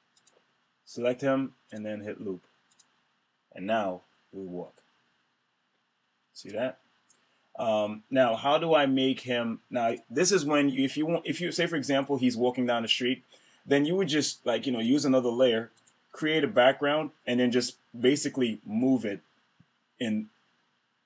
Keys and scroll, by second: 10.5 Return.